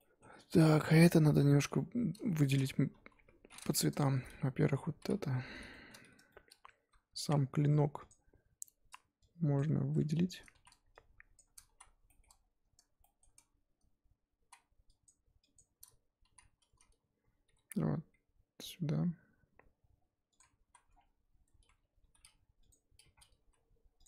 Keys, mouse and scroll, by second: 1.3-1.7 scroll up 4, 1.7 middle click, 2.6-2.9 scroll down 1, 2.9 KP_1, 3.4 scroll up 2, 3.7 click, 4.0-5.0 shift+middle drag, 5.0 l, 6.3-8.1 shift+middle drag, 8.1 alt+click, 9.6 shift+click, 10.6 z, 11.3 shift+click, 11.7 z, 12.1 shift+middle click, 12.3-13.0 scroll up 1, 13.0-14.5 scroll up 4, 13.0 shift+middle click, 14.5 z, 15.0 shift+click, 15.5 shift+click, 16.3 z, 17.5 g, 20.7 z, 20.9 Tab, 20.9-21.5 scroll down 4, 21.5 Tab, 22.0 g, 23.4 s.